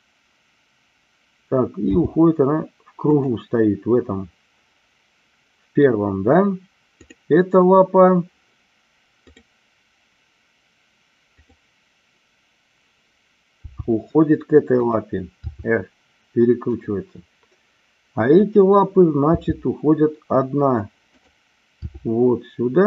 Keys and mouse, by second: 1.9 g, 3.0 click, 13.7 g, 14.8 click, 15.6 r, 16.7 click, 19.3 g, 21.2 click, 21.9 r.